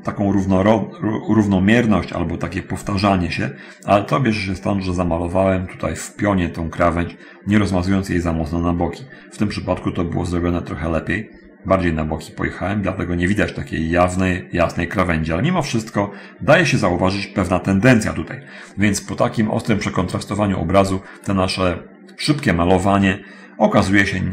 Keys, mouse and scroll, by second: 19.3-20.1 scroll up 2, 20.1 click.